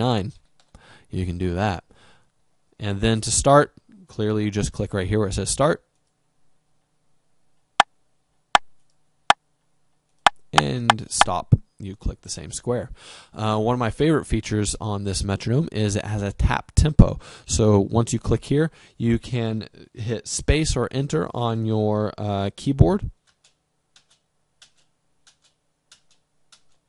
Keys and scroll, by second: 0.2 7, 0.9 9, 23.2 space.